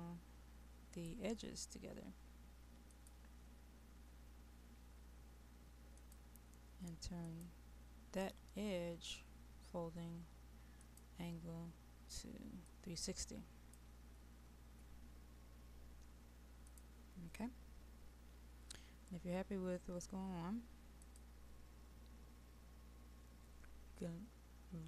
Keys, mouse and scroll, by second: 0.0-1.0 scroll up 1, 1.0 click.